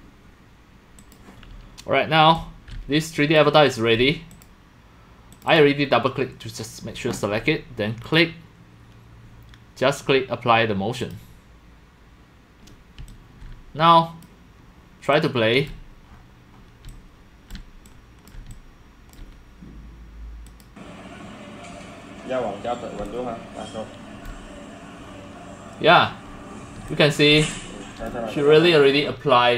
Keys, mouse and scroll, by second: 1.1 click, 2.3 click, 2.4-4.0 typing, 4.4 click, 5.3 click, 5.5 click, 8.0 click, 11.0 click, 12.0 click, 12.8-29.5 typing, 14.2 click, 15.1 click, 16.1 middle click, 16.7 middle click, 17.1 click, 17.8 click, 18.5 click, 20.5 click, 20.9-21.2 drag, 21.3 click, 23.0-24.3 drag, 26.9 click, 27.3 click, 27.5 click.